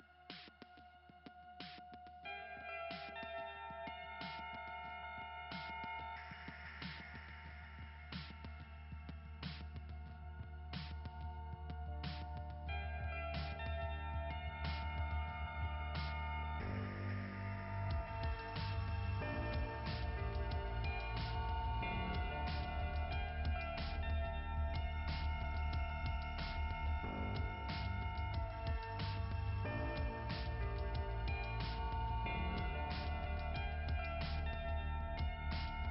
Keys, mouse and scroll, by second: 4.3 click, 10.3 click, 10.7 click, 10.8 click, 11.1 click, 15.9-17.6 typing, 18.6 click, 22.9 click, 27.2 click, 27.4 click, 30.8-31.3 scroll down 2, 33.1 click.